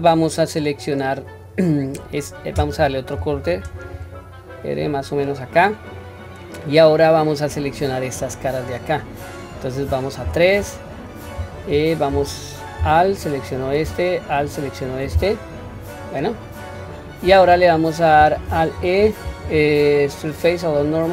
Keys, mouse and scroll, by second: 0.6-1.5 scroll up 2, 8.1-9.3 middle drag, 10.2 3, 13.1 alt+click, 14.3 alt+shift+click, 16.4-16.7 scroll down 1, 16.7-17.3 middle drag, 17.7-18.2 scroll up 1, 18.5 scroll up 1, 18.7 alt+e.